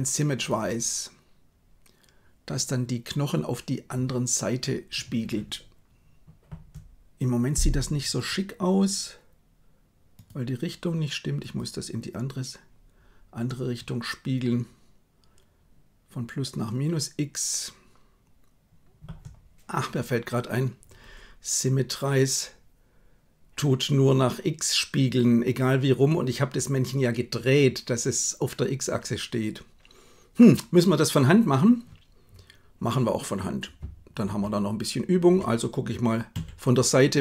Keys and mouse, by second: 10.1-11.5 drag, 34.1 ctrl+KP_3, 36.4 KP_3.